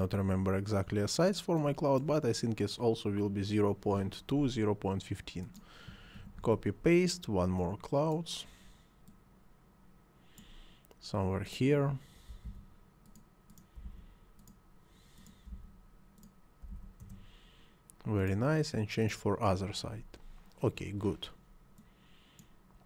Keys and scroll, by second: 6.2 ctrl+c, 6.4 ctrl+v, 12.5 2, 13.9 2, 15.5 2, 17.0 Return.